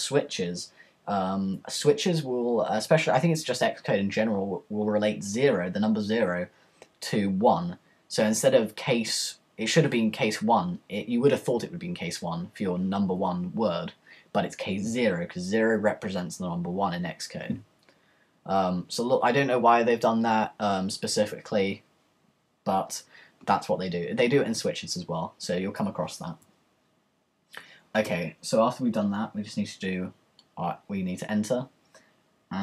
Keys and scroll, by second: 28.1 Return.